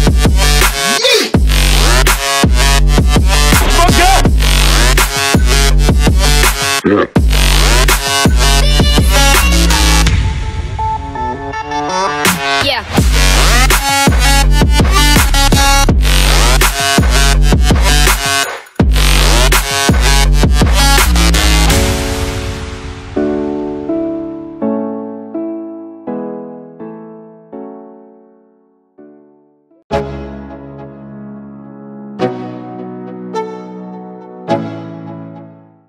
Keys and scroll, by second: 25.3 space, 25.6 space.